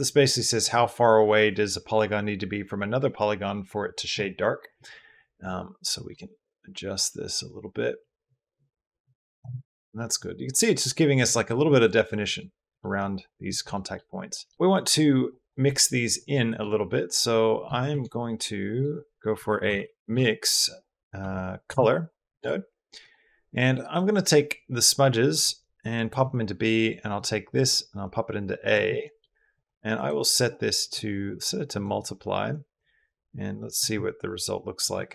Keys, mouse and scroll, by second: 5.7-9.3 shift+middle drag, 9.5 middle drag, 11.1 middle drag, 11.6-12.2 middle drag, 12.6 middle click, 13.5 shift+click, 14.5 click, 15.1 click, 15.6 click, 16.1 click, 16.3 click, 16.9 click, 17.7 shift+a, 22.8 click, 23.7 click, 24.0-25.9 drag, 26.9-28.5 drag, 28.9 click, 29.3 click, 29.9-31.6 drag, 33.8 click.